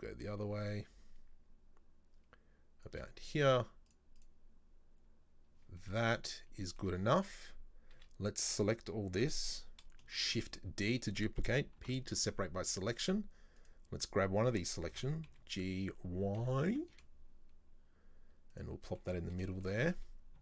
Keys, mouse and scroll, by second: 3.9-5.6 drag, 5.8-8.0 shift+middle drag, 8.0 a, 10.2 shift+d, 11.8 p, 13.0 Tab, 13.6 right click, 14.9 g, 18.9 shift+middle click, 19.9-20.4 scroll up 2.